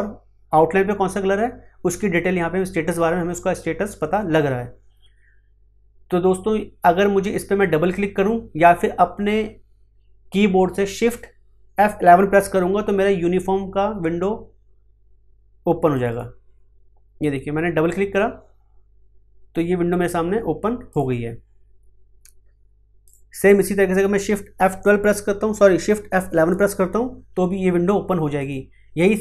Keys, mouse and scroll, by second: 15.9 click, 20.8 click, 26.1 shift+F11, 28.3 click.